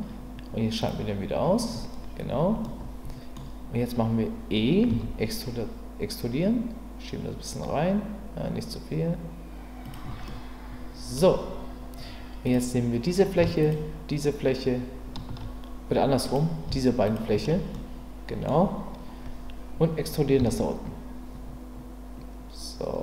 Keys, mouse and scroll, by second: 0.8 click, 2.7-3.4 middle drag, 4.9 e, 9.8 click, 10.3-11.1 middle drag, 13.6 shift+click, 16.2 click, 17.0 shift+click, 17.7-18.5 middle drag, 20.4 e.